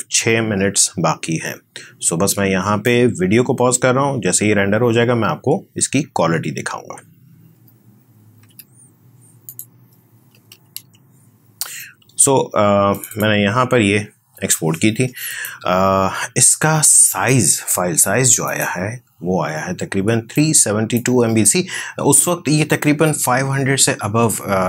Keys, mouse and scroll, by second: 2.8-7.5 drag, 7.5 Escape, 8.4 alt+Tab, 9.4 click, 10.0-11.2 typing, 12.9 click, 17.0 right click, 18.4-24.3 drag, 24.3-24.6 drag.